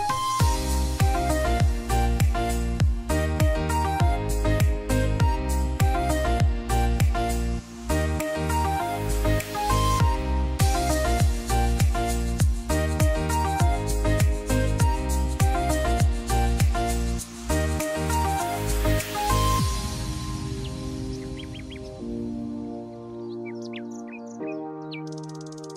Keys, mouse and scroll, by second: 0.1 ctrl+d, 3.3 click, 4.4 click, 5.9 ctrl+i, 7.8 click, 9.6-11.5 alt+right drag, 13.5 alt+scroll down 1, 14.2 alt+right click, 15.4 alt+right click, 17.8-20.0 drag, 20.2 alt+right click, 20.8-22.4 drag, 24.3 x, 24.9-25.7 drag.